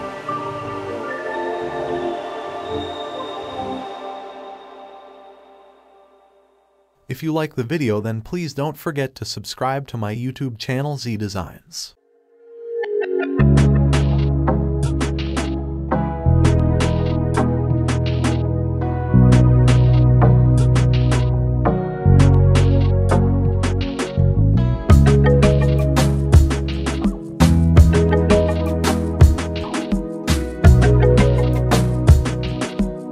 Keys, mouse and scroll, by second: 4.5 scroll up 1, 4.8-5.3 scroll down 1, 5.3-6.6 scroll up 1, 7.0-7.4 scroll down 1, 7.4 space, 7.6 click, 7.9-9.2 space, 10.0-10.6 scroll down 2, 11.0 scroll down 1, 11.1 space, 11.2-11.8 click, 11.6 space, 12.5-14.0 drag, 16.6 space, 16.8 click, 17.1 space, 17.4-22.2 drag, 26.1 ctrl+z, 26.6 click, 29.2-30.8 scroll down 2, 31.4 space, 31.6 click, 31.8 space, 32.0 space, 32.6-33.1 drag.